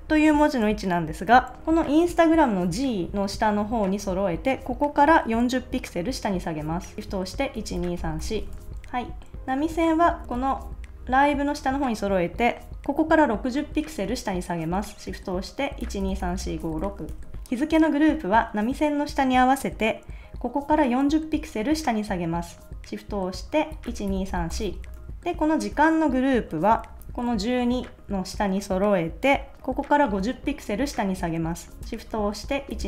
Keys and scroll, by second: 1.6 Up, 7.5 shift+Down, 8.5 super+s, 9.6 shift+Up, 16.0 shift+Down, 17.1 super+s, 23.9 shift+Down, 24.9 super+s, 27.1 Down, 27.5 Up, 32.7 shift+Down.